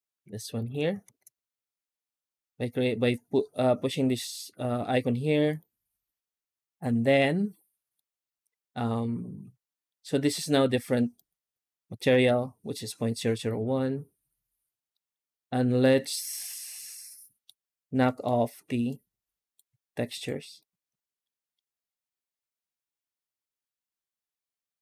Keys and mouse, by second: 0.0 g, 0.9 alt+shift+z, 1.5 ctrl+s, 5.4 click, 7.9-9.8 middle drag, 11.1 click, 14.8 middle click, 15.7-17.4 middle drag, 18.0 middle click, 18.7 click, 18.9 click, 19.9 ctrl+right click, 20.4 ctrl+right click, 21.2 middle click, 22.5 click, 23.3 click, 23.6 click, 23.9 ctrl+x, 24.2 ctrl+click, 24.4 ctrl+x.